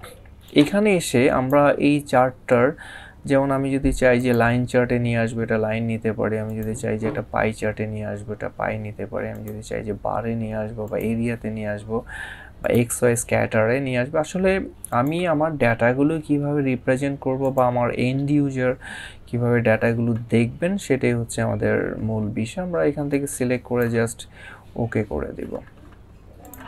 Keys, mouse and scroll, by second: 0.2 click, 4.0 click, 6.3 click, 10.8 click, 14.7 click, 17.2 click, 22.9 click, 26.2 click.